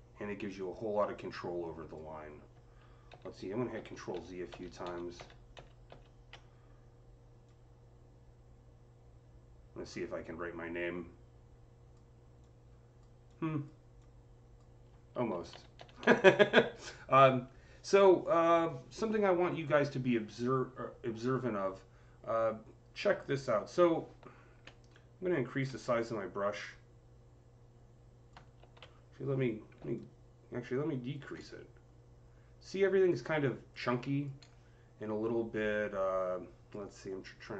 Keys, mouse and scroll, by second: 3.0 ctrl+z, 3.6 ctrl+z, 4.0-5.4 ctrl+z, 7.3-15.6 drag, 15.0 ctrl+z, 15.4 ctrl+z, 15.6 ctrl+z, 24.3-25.8 typing, 24.8 click, 25.8-29.8 drag, 28.4 ctrl+z, 29.6-30.8 typing, 29.8-31.3 drag, 31.3 click, 37.0-37.5 drag, 37.0 typing.